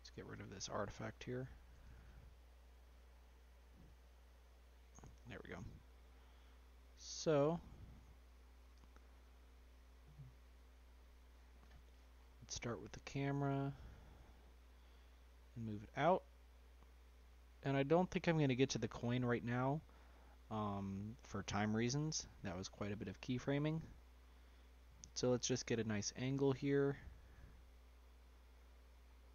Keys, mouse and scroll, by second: 2.8-3.9 drag, 4.6-5.2 middle drag, 5.2-5.7 scroll up 2, 5.7 scroll down 2, 6.1-6.7 shift+middle drag, 6.7 scroll up 1, 6.8 middle click, 7.3 scroll down 1, 8.6 click, 11.6 click, 12.1-13.3 scroll down 1, 13.3 click, 13.8 click, 15.5 g, 19.5-21.1 scroll up 4, 21.1 g, 23.6-24.2 scroll up 2, 24.2-24.9 middle drag, 24.9 scroll up 2, 25.1-29.0 shift+middle drag, 29.0 scroll up 1, 29.2-29.3 middle drag.